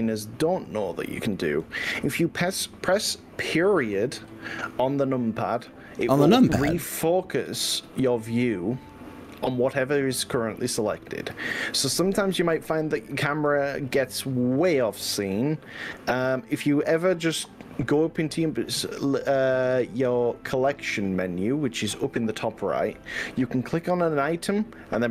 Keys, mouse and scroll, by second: 8.0 KP_Decimal.